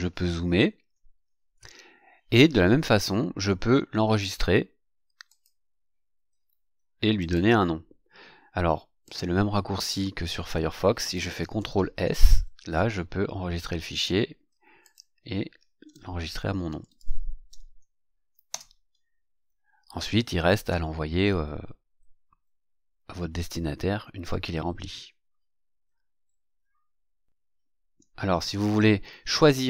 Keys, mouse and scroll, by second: 0.0-0.9 ctrl+scroll up 4, 5.2 click, 7.1 click, 9.0 click, 11.5 ctrl+s, 14.8 click, 16.4-17.6 typing, 18.5 KP_Enter, 20.0-20.8 scroll up 4, 24.9 ctrl+scroll down 2, 25.7 ctrl+scroll down 2.